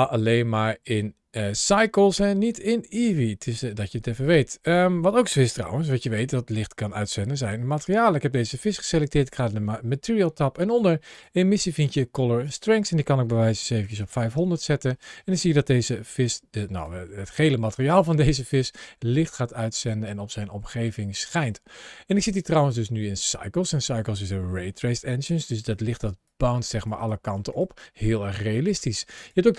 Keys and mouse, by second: 0.3 click, 5.6-5.9 shift+middle drag, 6.5 middle click, 8.2 click, 10.6 click, 10.9 click, 12.3-14.1 drag, 13.9 KP_0, 15.7 g, 17.0 middle click, 17.6 g, 19.5 click, 20.0-20.8 middle drag, 20.8 g, 21.2 click, 22.4 click, 25.2 ctrl+shift+a, 29.0-29.5 drag.